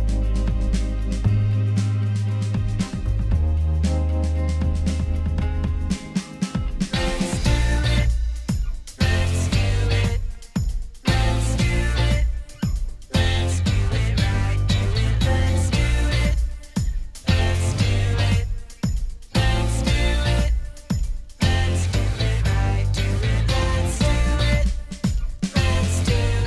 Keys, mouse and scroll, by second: 19.3 ctrl+z, 20.7-21.7 drag.